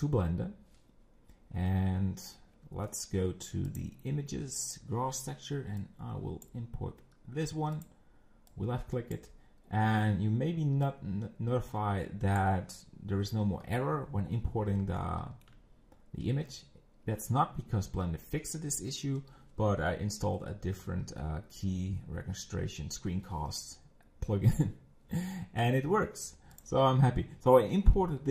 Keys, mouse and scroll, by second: 1.2-1.5 scroll down 1, 1.5 scroll up 2, 2.1-2.7 scroll down 1, 8.5 click, 15.0-18.5 shift+middle drag, 20.9 scroll up 2, 21.3 scroll down 1, 25.6 click, 26.5 click.